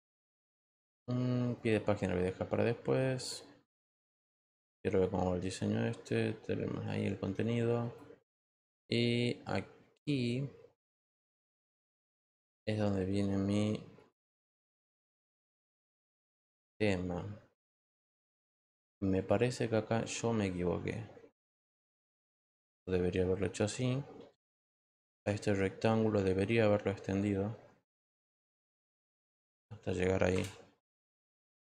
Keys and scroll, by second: 25.1 ctrl+t, 30.3 Return.